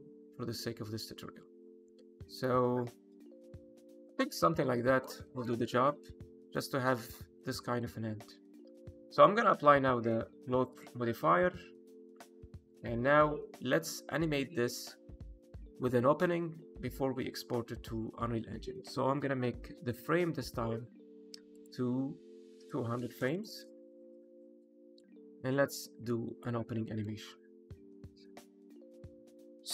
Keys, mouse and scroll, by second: 3.6 space, 4.1 middle click, 5.3 shift+middle click, 5.6 middle click, 7.4 middle click, 8.4 click, 10.7 click, 12.1 click, 13.2 middle click, 21.5 click, 23.3 KP_0, 25.0 click, 26.9 middle click, 29.4 click.